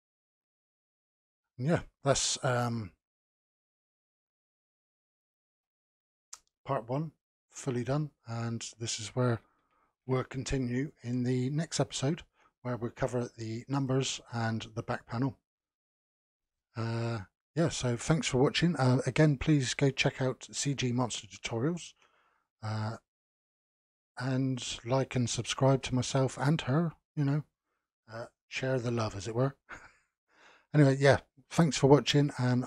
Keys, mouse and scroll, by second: 1.5-4.5 middle drag, 4.5 click, 5.5 KP_Decimal, 7.2 click, 7.8-8.4 scroll down 1, 8.4-9.9 middle drag, 9.9 ctrl+s.